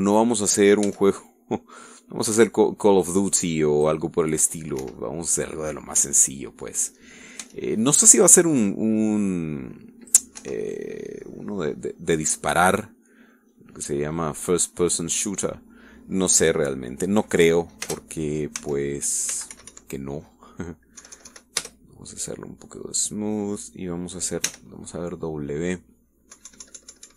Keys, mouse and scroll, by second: 0.7 Escape, 0.9-1.3 scroll up 1, 1.8 c, 2.3-5.1 drag, 5.4 middle click, 5.8 Escape, 6.0 middle click, 6.7 scroll down 1, 7.1 shift+middle click, 8.4 c, 8.8-11.3 drag, 11.4 Escape, 11.6-13.9 middle drag, 14.4-14.7 scroll up 2, 15.3 scroll down 2, 15.8 middle click, 18.8 space, 19.6 s, 20.3 m, 20.5 o, 22.0 Down, 22.6 Return, 25.5 w.